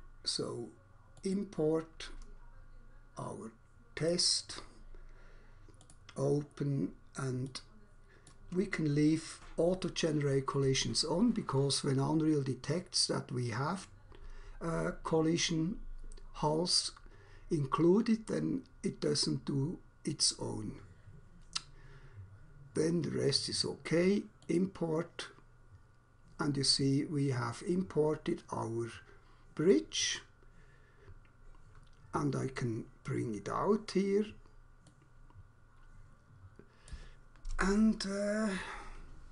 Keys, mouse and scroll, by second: 1.2 click, 4.0 click, 5.9 click, 7.5 click, 8.3 click, 24.5 click, 29.7 click, 33.0 click, 34.9 click, 36.9 click.